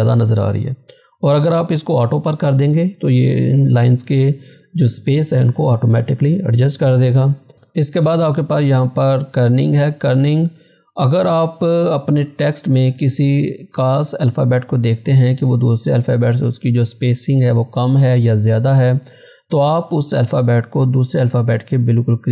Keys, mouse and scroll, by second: 6.3 click.